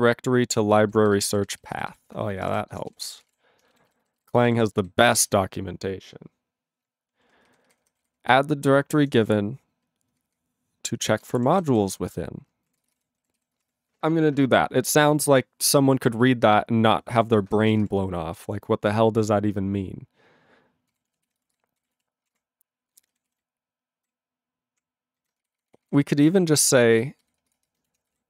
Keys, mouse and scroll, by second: 0.0 alt+b, 0.3 alt+f, 0.5 alt+f, 0.7 alt+f, 0.8 alt+b, 1.0 alt+b, 1.2 alt+b, 1.3 alt+b, 1.5 alt+b, 1.7 alt+b, 1.9 alt+b, 2.4 ctrl+space, 2.4 ctrl+e, 2.5 ctrl+g, 2.9 ctrl+s, 3.1 ctrl+a, 3.2 ctrl+space, 3.2 ctrl+e, 3.3 ctrl+g, 3.9 alt+b, 4.0 alt+b, 4.2 alt+b, 4.4 alt+b, 4.6 alt+b, 4.8 alt+b, 5.2 alt+b, 7.5 ctrl+alt+f, 7.7 ctrl+alt+f, 7.8 ctrl+alt+f, 8.0 ctrl+alt+f, 8.2 ctrl+alt+f, 8.8 ctrl+alt+b, 9.0 ctrl+alt+f, 9.2 ctrl+alt+f, 9.7 ctrl+alt+b, 10.1 ctrl+alt+f, 10.3 ctrl+alt+f, 11.0 ctrl+alt+f, 11.1-12.3 typing, 12.8 ctrl+a, 12.8 ctrl+space, 12.9 ctrl+e, 13.0 ctrl+g, 13.5 ctrl+s, 13.6 ctrl+space, 13.6 ctrl+a, 17.2 ctrl+g, 17.6 ctrl+s, 17.7 ctrl+space, 17.8 ctrl+e, 20.9 ctrl+g, 21.3 ctrl+s, 21.4 ctrl+space, 21.5 ctrl+a, 21.8 ctrl+g, 22.0 ctrl+e, 22.2 ctrl+space, 22.3 ctrl+a, 22.9 ctrl+g, 23.3 ctrl+s, 23.4-24.0 ctrl+n, 24.1-24.8 ctrl+p, 25.2 ctrl+n, 25.6 alt+f, 25.7 alt+f, 25.9 alt+f, 26.2 alt+b, 26.3 alt+b, 26.8 alt+f, 27.4 ctrl+BackSpace, 27.6 ctrl+BackSpace, 27.7-28.2 typing.